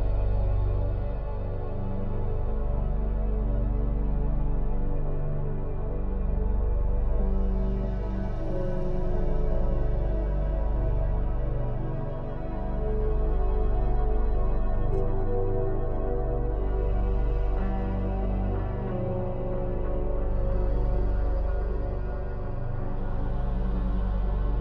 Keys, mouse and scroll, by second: 1.7 Tab, 4.1 click, 4.6-6.8 shift+middle drag, 6.8 shift+e, 11.4 middle click, 12.1-12.8 scroll down 1, 12.8-14.0 middle drag, 14.0 click, 14.3 shift+e, 19.3-20.9 middle drag, 20.9 click, 21.7 shift+e, 23.2-24.6 shift+middle drag.